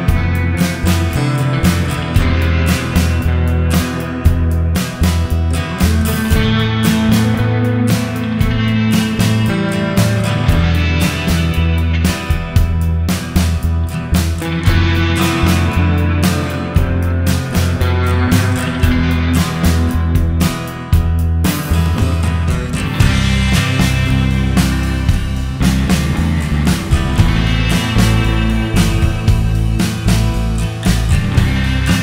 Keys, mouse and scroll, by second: 0.9 click, 1.8 click, 10.1 space, 10.7 click, 11.4 click, 12.1 click, 12.2 click, 12.9 click, 13.9 click, 14.1-14.8 scroll up 7, 14.3 middle click, 14.8 click, 15.2 scroll up 1, 15.4 middle click, 15.6 scroll down 5, 15.9 shift+a, 19.3-19.7 scroll down 3, 19.7 click, 20.2 click, 20.7 click, 21.3 shift+a, 22.8 click, 23.5 click, 23.8 click, 24.2 shift+a, 26.0 click, 26.9 click, 27.5 click, 27.9 click, 28.4 click, 29.0 shift+a, 31.2 click.